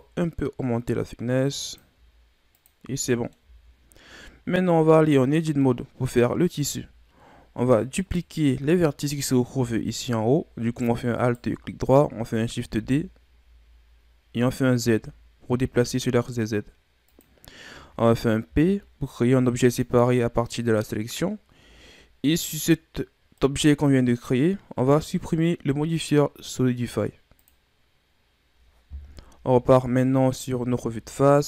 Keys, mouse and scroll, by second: 2.9 scroll down 3, 3.1 middle click, 3.4 a, 4.1-5.0 scroll up 6, 5.0 right click, 5.4 middle click, 5.8-6.2 scroll up 1, 6.6 Tab, 8.0 right click, 11.2 alt+right click, 12.6 shift+d, 18.5 p, 21.6 Tab, 23.4 right click, 27.4-29.0 drag, 29.0 KP_1, 30.8 Tab.